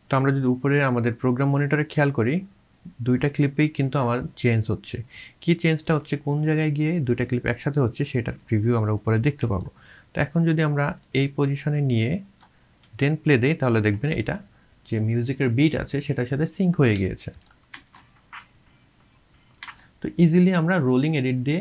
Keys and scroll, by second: 17.8 space.